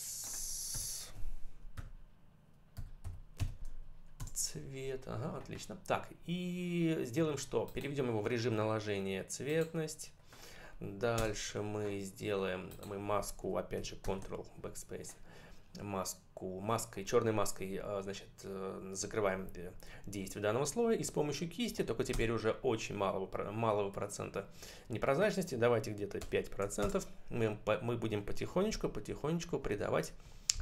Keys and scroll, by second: 0.6 BackSpace, 1.6-3.7 typing, 4.0 Return, 11.1 Return, 13.9 ctrl+BackSpace, 22.0 Return, 26.1 5, 26.7 Return, 28.8 ].